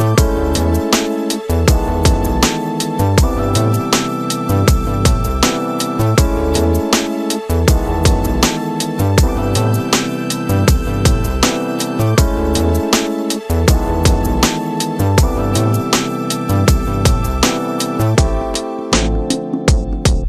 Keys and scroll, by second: 2.7 space, 5.5 s, 5.7 space, 6.7 [, 8.7 [, 12.2 space, 15.5 ctrl+KP_Subtract, 18.7 Return, 19.5 ctrl+u.